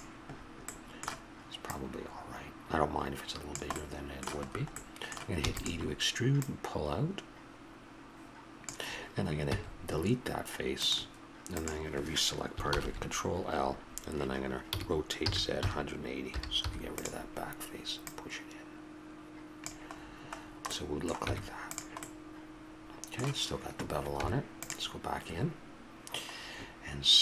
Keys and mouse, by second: 0.4-1.6 middle drag, 1.6-3.5 drag, 3.5 middle click, 5.4 e, 6.3-8.3 drag, 9.5 x, 11.5-12.7 drag, 12.7 ctrl+l, 14.7 r, 20.0-21.3 middle drag, 21.3 Tab, 24.2 Tab.